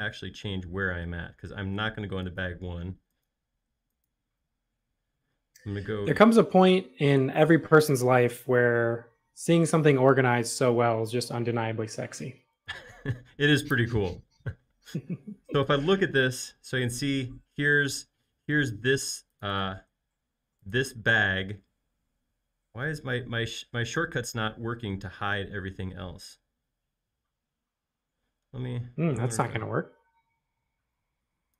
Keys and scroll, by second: 18.3 shift+q.